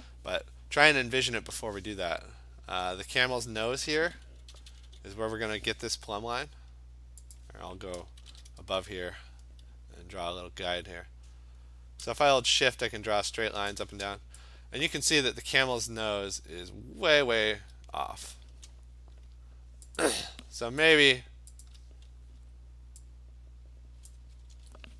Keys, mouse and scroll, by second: 4.6 [, 4.7 [, 4.9 [, 7.4 click, 8.3 ctrl+shift+n, 8.7 Return, 13.8-15.0 shift+click, 14.7 click, 15.0 click, 19.8 click, 20.0 click, 21.0 shift+click, 21.7 click, 22.4 v, 24.1 click, 24.6 ctrl+z.